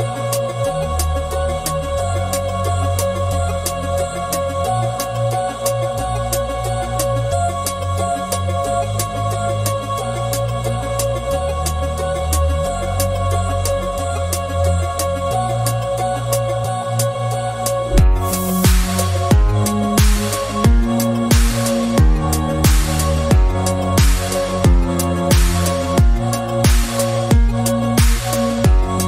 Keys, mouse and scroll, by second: 0.5 s, 1.7 scroll down 1, 2.0-4.2 shift+middle drag, 4.2-5.5 drag, 5.7-6.7 shift+middle drag, 6.7 scroll up 1, 7.1 click, 8.0 s, 10.0-11.2 drag, 11.2 alt+z, 11.6 scroll down 1, 12.4 click, 12.7-13.1 scroll down 1, 13.1 alt+z, 13.3 scroll down 3, 13.6 shift+middle click, 14.1 scroll up 2, 14.8 Tab, 15.0 scroll down 1, 15.3-16.3 middle drag, 16.3 KP_1, 16.7 scroll up 3, 17.5 shift+middle click, 18.0 Tab, 20.2 alt+click, 20.8 scroll up 1, 21.5 s, 23.2-24.3 shift+middle drag, 24.3 alt+click, 25.3 g, 27.7 s, 28.5-29.0 shift+middle drag.